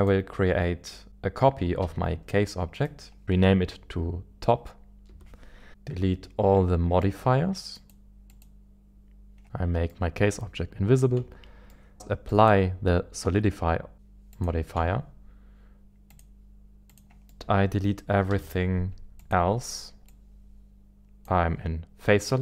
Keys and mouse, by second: 2.1 shift+d, 3.2-5.7 drag, 7.0 click, 7.7 click, 9.9-11.2 middle drag, 11.2 Tab, 11.7 middle click, 12.3-14.1 drag, 14.4 click, 14.8 Tab, 16.2-17.0 drag, 17.3 middle click, 17.3 Tab, 17.4 KP_1, 18.3 z, 20.2-21.3 drag.